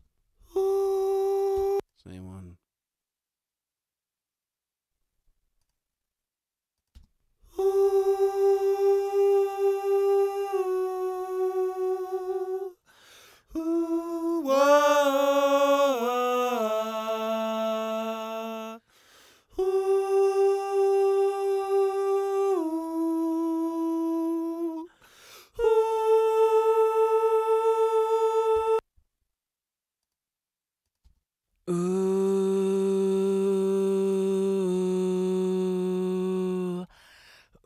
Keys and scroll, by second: 1.5 space, 6.9 space, 28.5 space.